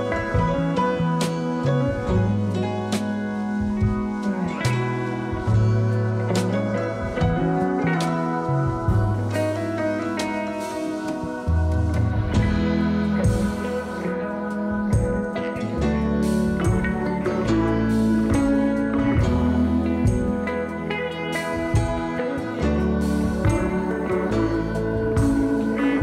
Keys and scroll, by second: 19.7 3.